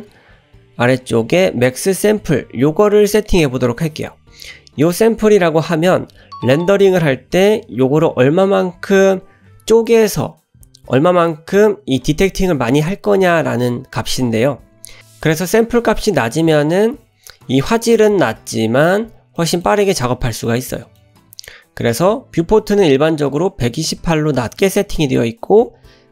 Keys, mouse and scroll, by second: 19.4 middle drag, 20.4-21.0 middle drag.